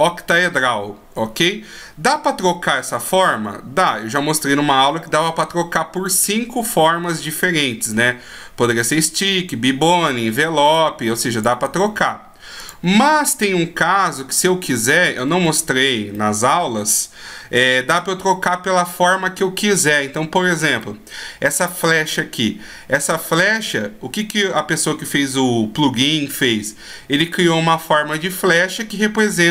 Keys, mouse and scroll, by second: 10.7 click, 11.4 click, 14.3 middle click, 15.1-15.6 shift+scroll up 1, 15.6-15.9 scroll down 2, 16.1 middle click, 19.1 scroll up 1, 20.7 right click, 23.7 scroll up 1.